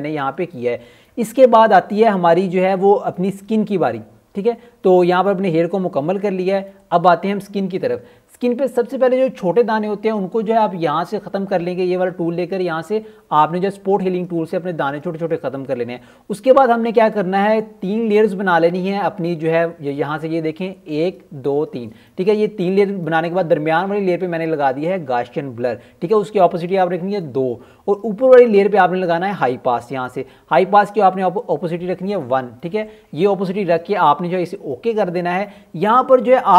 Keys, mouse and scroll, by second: 0.0 [, 0.2 click, 0.5 ], 1.4 click, 1.9-6.2 typing, 2.0 click, 3.4 click, 3.8 click, 5.6 click, 6.0 click, 6.6 click, 7.3 [, 7.4 click, 7.6 [, 7.6 click, 8.1 ], 8.4 click, 9.2 alt+scroll up 1, 10.3 right click, 11.6 click, 12.8 typing, 13.8 click, 16.5 alt+scroll down 1, 17.1-17.8 alt+scroll down 3, 20.8 click, 22.4 click, 35.7 click.